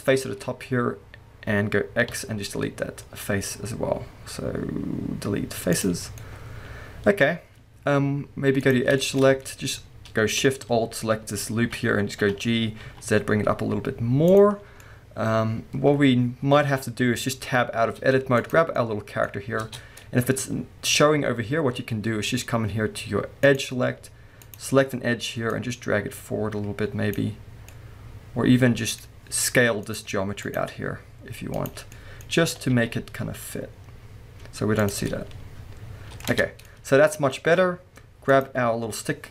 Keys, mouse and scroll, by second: 2.1 x, 6.0 scroll down 2, 6.2-8.6 middle drag, 7.3-8.6 scroll up 2, 8.6 click, 9.0-11.3 shift+middle drag, 9.2-10.3 scroll up 2, 10.3-11.3 scroll up 1, 11.3 alt+shift+click, 12.2 g, 14.4 click, 14.5 scroll down 2, 14.8-18.4 middle drag, 17.0-17.9 scroll down 2, 17.9 Tab, 18.4 click, 18.8-20.0 middle drag, 19.3-19.6 scroll up 2, 19.6 Tab, 20.2-21.0 scroll up 1, 21.6-23.4 scroll down 1, 23.4 click, 23.9-24.4 scroll up 1, 24.4 click, 25.5 click, 27.7-29.8 middle drag, 29.8 click, 30.4 click, 31.5 click, 31.9-34.9 middle drag, 32.5 g, 34.9 click, 35.0-37.9 middle drag, 36.3 Tab, 36.5 scroll down 2, 37.9-38.3 scroll down 1, 38.3 click, 38.8 scroll up 1.